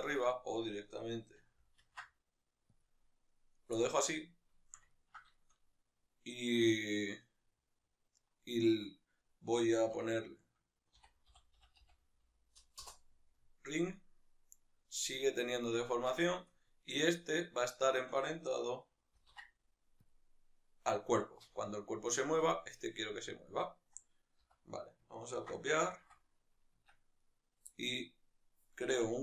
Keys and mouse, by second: 0.2-1.8 right drag, 1.8 ctrl+alt+s, 2.8 click, 3.8-16.8 middle drag, 12.8 F2, 16.8-17.9 right drag, 20.1 ctrl+p, 23.5-27.0 right drag, 27.0 Tab, 27.2-29.0 right drag, 29.0 Tab.